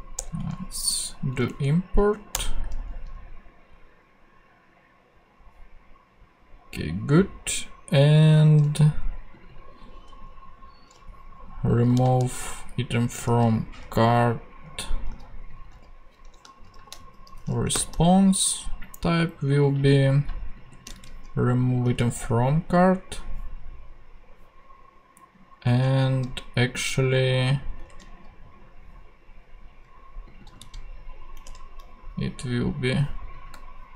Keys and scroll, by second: 0.1 alt+Return, 1.3 alt+Down, 2.3 Return, 11.9 super+c, 14.5 super+v, 15.7 super+v, 16.4 shift+super+v, 16.7 shift+super+r, 16.7-18.0 typing, 20.9 super+c, 22.0 super+v, 27.9 ctrl+super+Tab, 30.6 super+c, 31.3 ctrl+super+c, 31.4 ctrl+super+Tab.